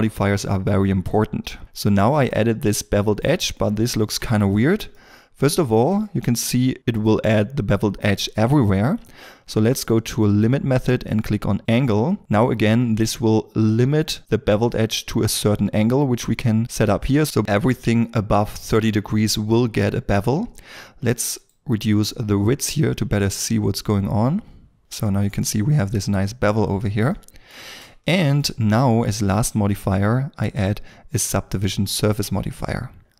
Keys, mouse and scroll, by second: 1.9 ctrl+middle click, 3.5 shift+middle click, 4.8 ctrl+middle click, 21.4 shift+click, 25.0 shift+middle click, 26.5-26.9 scroll down 1, 27.0 shift+middle click.